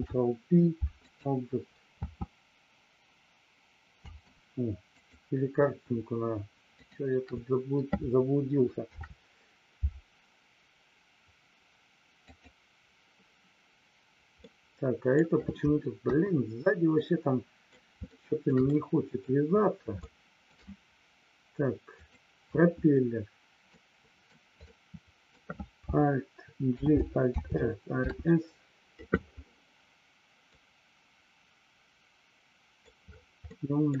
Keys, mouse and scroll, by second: 2.0 space, 5.0 click, 6.7 shift+click, 14.5 middle click, 16.0 KP_1, 17.0 middle click, 18.0 shift+middle click, 18.6 middle click, 20.0 shift+middle click, 22.0 click, 23.6 middle click, 24.6 middle click, 26.7 alt+g, 27.4 alt+r, 28.0 alt+s, 30.6-32.9 middle drag, 33.4 middle click.